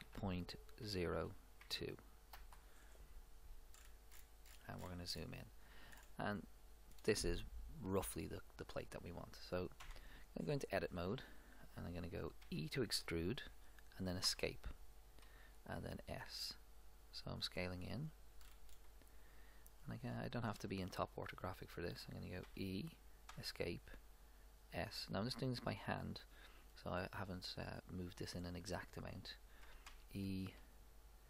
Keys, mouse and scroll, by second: 3.8-9.5 middle drag, 9.8 Tab, 12.4 e, 15.8 s, 18.4-20.9 middle drag, 22.5 e, 24.0 s, 29.7 e, 30.6 s.